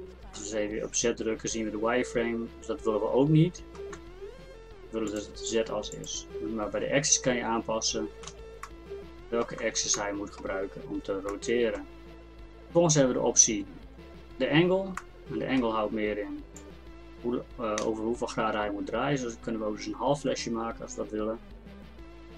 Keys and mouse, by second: 4.0 Tab, 7.5 Tab, 8.0 Tab, 8.3 z, 8.7-11.2 drag, 9.6 Tab.